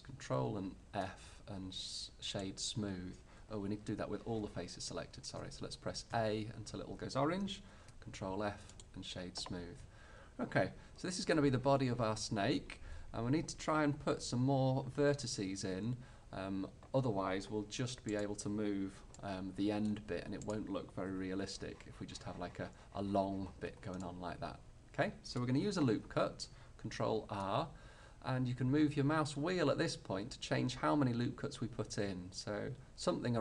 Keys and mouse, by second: 0.4 ctrl+f, 5.4 a, 6.2 a, 7.8 ctrl+f, 11.0-18.1 middle drag, 18.1-19.3 drag, 19.9 middle click, 20.5-22.4 right drag, 21.2 g, 22.4-24.1 middle drag, 27.3 ctrl+r.